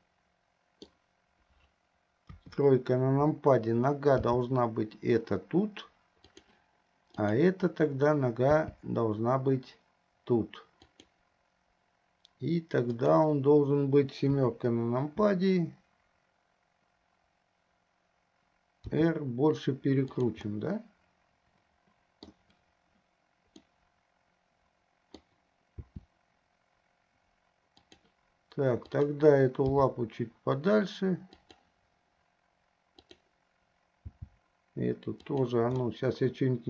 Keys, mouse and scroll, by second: 0.2-1.2 middle drag, 2.4 KP_3, 4.4 g, 7.5 click, 8.8 g, 13.0 click, 14.6 KP_7, 18.9 r, 20.7-22.2 middle drag, 23.8-25.6 middle drag, 26.0 r, 29.1 click, 30.0 g, 33.2 click, 34.4 g, 36.2-36.6 middle drag.